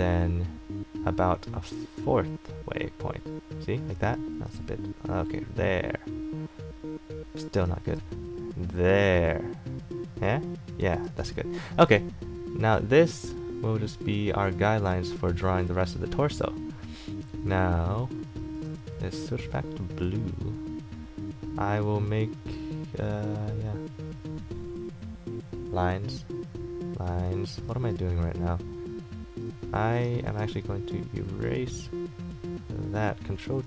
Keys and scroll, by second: 4.1 ctrl+z, 7.6 ctrl+z, 16.0 a, 19.2 ctrl+z, 19.7 x, 27.9 ctrl+z, 30.5 e.